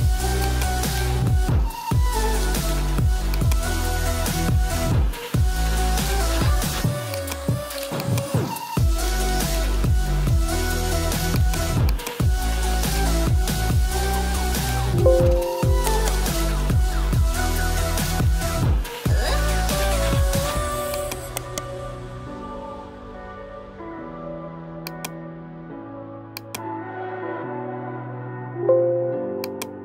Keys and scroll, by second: 14.6 ctrl+j, 28.5 ctrl+t.